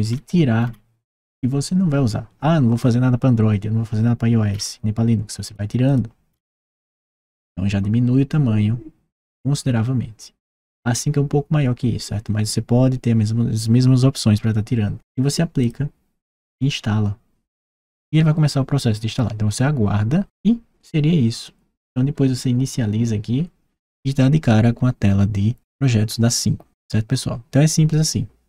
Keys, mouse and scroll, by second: 4.2 scroll down 1, 5.2 click, 5.6 click, 6.1 scroll up 1, 6.6 click, 15.3 click.